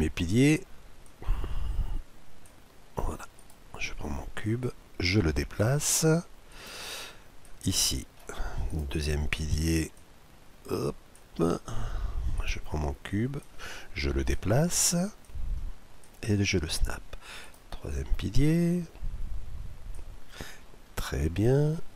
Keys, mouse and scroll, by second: 1.0-2.9 drag, 3.3-5.1 right drag, 4.6-6.4 drag, 6.5-8.2 drag, 7.8-9.4 middle drag, 8.6-10.4 right drag, 9.9-11.5 drag, 11.5-13.3 middle drag, 12.3-14.0 right drag, 13.4-15.1 drag, 15.2-16.9 drag, 16.6-18.2 middle drag, 17.4-19.1 right drag, 18.7-20.4 drag, 20.5 scroll down 1, 20.6-21.9 middle drag.